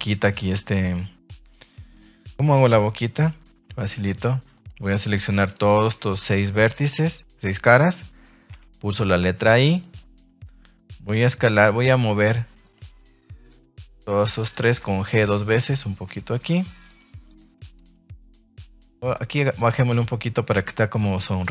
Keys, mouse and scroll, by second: 0.2 middle click, 0.8 shift+middle click, 1.5 middle click, 4.5 click, 5.1 right click, 5.4 shift+right click, 5.6 shift+right click, 5.9 shift+right click, 6.1 shift+right click, 6.4 shift+right click, 12.6 click, 13.9 shift+right click, 14.1 shift+right click, 14.5 shift+right click, 15.3 g, 16.0 click, 16.5 right click, 16.8 shift+right click, 17.2 shift+right click, 17.6 shift+right click, 18.6 right click, 18.9 shift+right click, 19.4 g, 20.5 click, 20.9 right click.